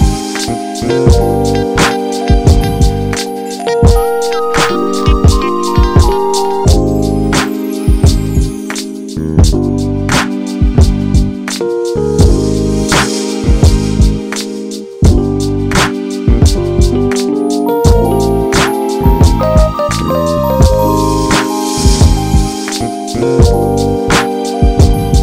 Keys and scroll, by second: 1.9 Return, 3.5 ctrl+j, 4.1 ctrl+t, 9.9 Return.